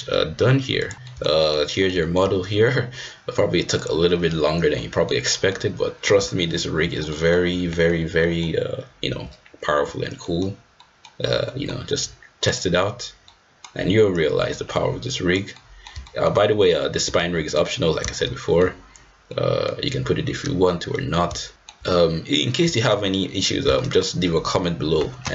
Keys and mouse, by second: 0.9 ctrl+z, 1.1 middle click, 1.4 shift+middle drag, 1.7 middle drag, 2.0 shift+middle drag, 3.8-4.9 drag, 4.9 middle click, 5.3 middle click, 6.1 g, 7.1 middle click, 7.5 g, 8.2 middle click, 9.1 g, 10.2 middle click, 10.8 middle drag, 11.4 middle drag, 12.5-13.3 drag, 13.3 middle click, 14.2 click, 14.8 right click, 15.4 click, 15.6 middle drag, 16.1 shift+middle click, 17.4 ctrl+z, 18.4 shift+click, 19.3 drag, 19.5 middle click, 20.9 middle click, 21.5 shift+middle click, 22.7 shift+middle click, 23.7 middle drag.